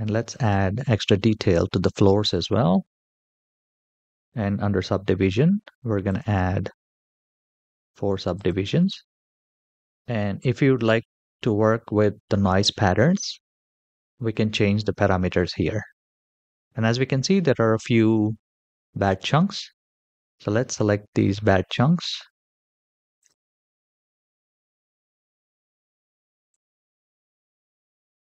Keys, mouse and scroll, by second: 0.1-2.1 drag, 2.7-5.2 scroll down 5, 5.8 click, 8.1 click, 10.7-11.7 scroll down 5, 16.9-17.5 scroll up 3, 17.5-18.0 middle drag, 19.8 scroll down 3, 21.5-21.9 middle drag, 22.1-22.9 scroll up 3, 22.9 click, 23.9-24.2 shift+middle drag, 26.3-27.0 shift+drag, 27.9-28.2 middle drag.